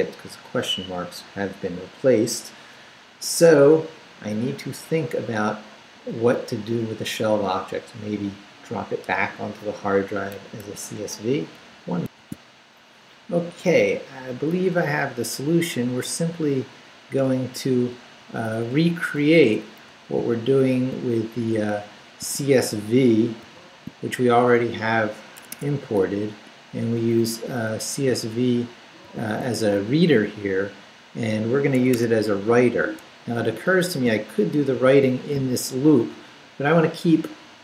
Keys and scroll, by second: 12.0 alt+shift+super+z, 17.3 Return, 17.9 Up, 20.2 shift+Up, 21.4 shift+Up, 22.2 shift+Up, 23.4 shift+v, 25.3 Escape, 25.8 Down, 29.0 shift+v, 29.4 shift+Down, 30.4 Down, 31.7 Home, 32.7 Down, 34.0 shift+Down, 34.7 shift+v, 35.2 shift+Down.